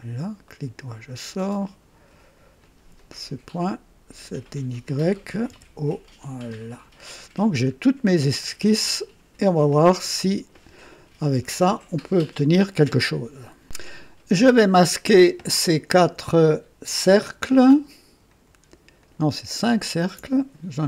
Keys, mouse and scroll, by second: 0.4 right click, 2.6 click, 5.4 typing, 6.4 click, 7.2 scroll down 1, 7.2 typing, 8.4 right click, 17.5 ctrl+click, 18.2 ctrl+click, 19.0 ctrl+click, 19.8 ctrl+click.